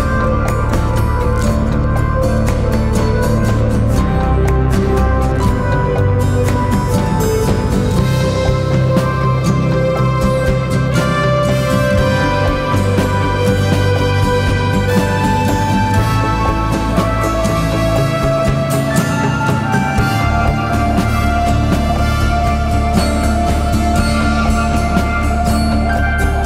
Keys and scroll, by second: 0.9 -, 1.0 Return, 1.2 2, 1.3 Return, 2.5 F9, 3.3 ,, 5.8 ctrl+z, 11.5 l, 16.9 l, 18.8 l, 21.3 k, 22.5 9, 22.6 Return, 23.0 -, 23.2 Return, 25.0 k, 26.0 -, 26.1 Return.